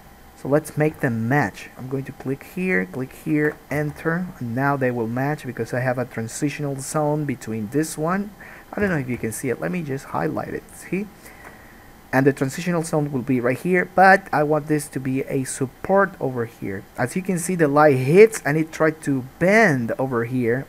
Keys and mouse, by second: 1.1 k, 4.0 alt+a, 9.0 3, 9.1 shift+middle click, 9.5 shift+click, 9.6 shift+middle click, 10.3 shift+click, 10.8 shift+middle click, 11.1 shift+click, 11.6-20.6 middle drag.